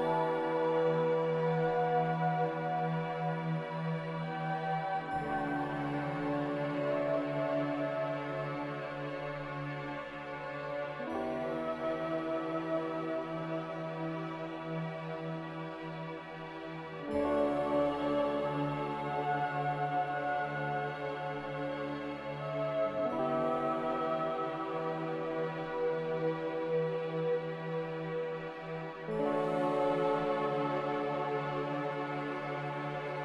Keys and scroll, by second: 0.2-2.3 typing, 4.5 Return, 4.5 5, 8.0 ctrl+c, 8.8-10.0 typing, 10.1 Return, 13.3-14.1 typing, 25.3 m, 30.0 a.